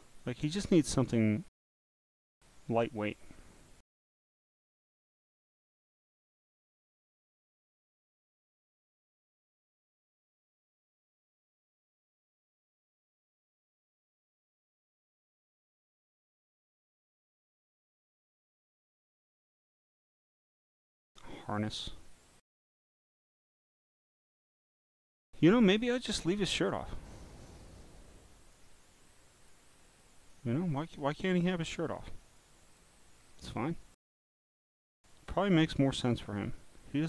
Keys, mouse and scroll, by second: 1.9 scroll down 1, 3.2 scroll down 1, 4.8-5.3 scroll down 1, 5.6-6.4 scroll down 1, 6.4 scroll down 1, 8.4-10.1 scroll down 2, 10.1 scroll down 1, 10.9 scroll down 1, 13.0 click, 14.1 click, 15.1-15.7 scroll down 2, 17.4 click, 19.7 click, 20.4-20.8 scroll down 3, 22.8 scroll down 1, 23.8-24.9 scroll down 3, 24.9 scroll down 1, 25.7 scroll up 2, 26.7 click, 27.4-28.5 drag, 29.4 click, 30.0 click, 30.7-31.2 scroll down 3, 31.2 scroll down 1, 31.9 scroll down 3, 32.4 click, 33.1-33.6 scroll up 8, 34.2-34.9 scroll down 9.